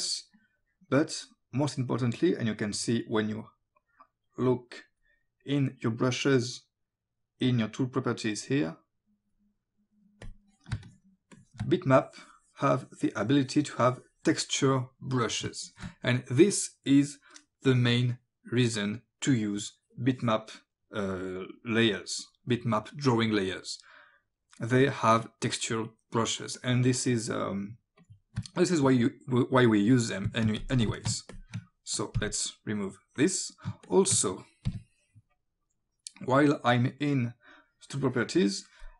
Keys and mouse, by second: 0.6 click, 7.4 click, 10.2 click, 10.8 space, 10.9 click, 11.4 click, 12.0 click, 15.5 space, 15.6 click, 21.6 click, 24.8 click, 28.0 click, 28.4 space, 28.6 click, 30.3 click, 30.3 space, 31.0 click, 31.4 ctrl+click, 32.2 Delete, 32.2 KP_Decimal, 33.2 click, 33.9 ctrl+click, 34.7 Delete, 34.7 KP_Decimal, 36.2 click, 37.5 click.